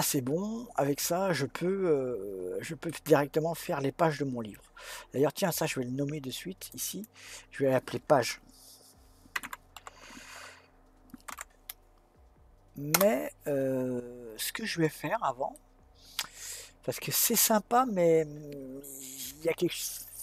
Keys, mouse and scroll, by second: 6.7 click, 6.9-10.0 drag, 15.5-18.7 middle drag.